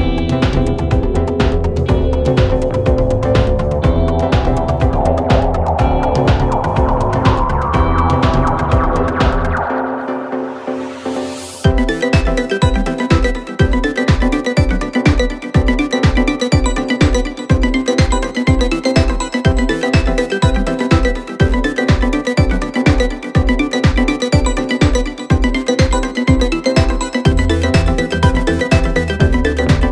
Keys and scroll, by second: 2.9 ctrl+F1, 3.5 1, 8.6 4, 11.5 ctrl+F1, 11.7 1, 13.5 4, 14.3 ctrl+F1, 18.8 3, 20.5 4, 22.5 ctrl+F1, 23.5 1, 25.1 4, 28.3 2.